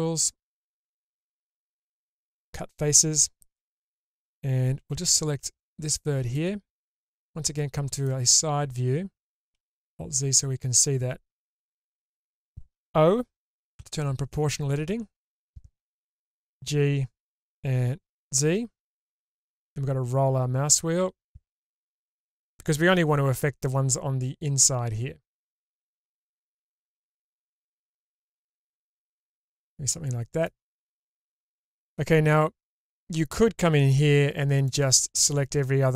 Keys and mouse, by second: 4.8 1, 6.4 middle click, 6.6 click, 6.6 right click, 6.8-8.0 alt+middle drag, 9.6 alt+z, 13.8 o, 16.4 g, 27.7 middle click, 28.2-30.4 drag, 28.2-29.4 right drag, 29.4-30.4 middle drag, 31.1 Tab, 33.9 2.